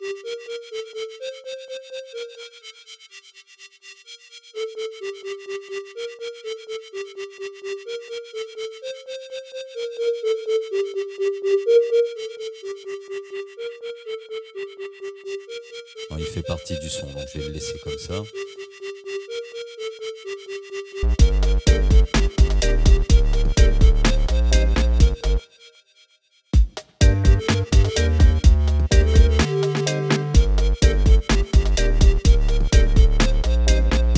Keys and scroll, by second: 25.4 space.